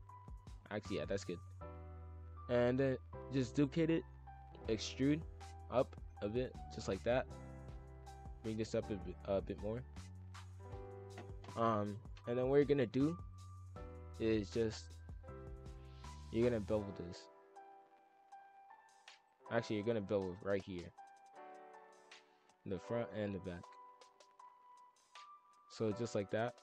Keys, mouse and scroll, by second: 0.6 middle click, 1.0 scroll up 3, 1.4 z, 2.2 scroll up 1, 2.3 middle click, 3.1 shift+d, 4.4 e, 6.1 middle click, 6.9 scroll down 1, 7.0-7.7 middle drag, 7.7 click, 8.2 click, 9.1 ctrl+z, 9.5 click, 10.3 middle click, 11.1-11.5 scroll up 1, 12.6-14.4 drag, 14.9 click, 15.2 scroll up 1, 15.2-15.9 middle drag, 15.9 click, 16.3 shift+click, 16.7 scroll up 1, 16.8 middle click, 17.1 ctrl+b, 19.6 middle click, 20.1 click, 20.7 click, 21.3 click, 22.1 click, 22.7 shift+click, 23.2 middle click, 23.5 scroll down 2, 23.8 middle click, 24.2 ctrl+b, 25.6 middle click, 25.8-26.2 scroll down 2, 26.2 middle click.